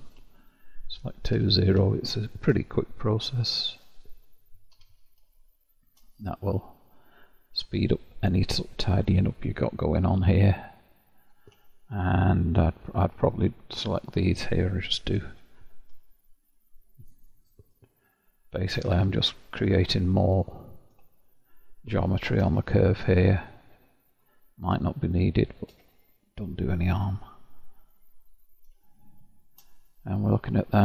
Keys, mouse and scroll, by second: 0.0 click, 0.5 shift+click, 1.4 0, 1.9-3.0 shift+middle drag, 3.0 click, 3.9 shift+click, 4.7 0, 5.3-9.3 shift+middle drag, 9.4 click, 9.9-12.9 middle drag, 12.9 click, 14.3 shift+click, 15.3 j, 17.0 click, 18.6 shift+click, 18.9 j, 20.3 click, 22.1 shift+click, 22.6 j, 24.1 click, 25.5 shift+click, 25.9 j, 26.4-26.9 scroll down 5, 26.9-28.0 middle drag, 28.0-28.5 scroll down 1, 28.5-28.9 scroll down 1, 28.9-30.8 shift+middle drag.